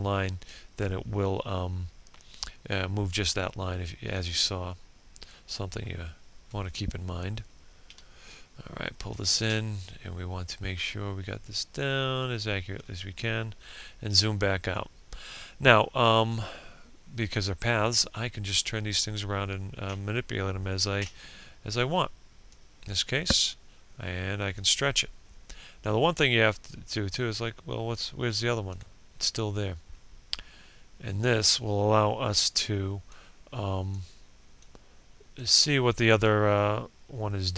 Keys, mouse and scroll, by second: 2.2-3.3 scroll up 1, 3.5 ctrl+scroll up 1, 5.9-7.2 drag, 8.3-10.4 alt+drag, 11.3 ctrl+scroll down 1, 20.0-37.5 drag.